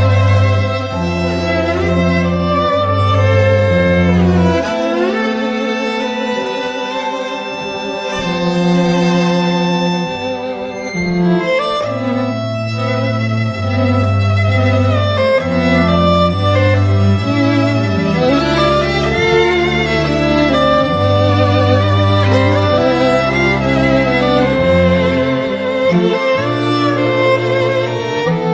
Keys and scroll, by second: 24.7-26.2 typing.